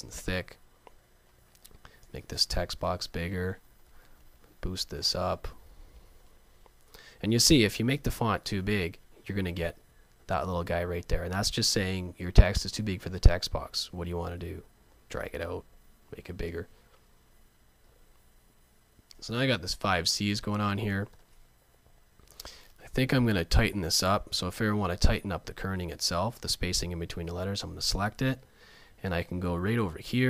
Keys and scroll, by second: 2.8 alt+shift+super+., 8.2 alt+shift+super+., 23.3 super+a, 26.1 super+a.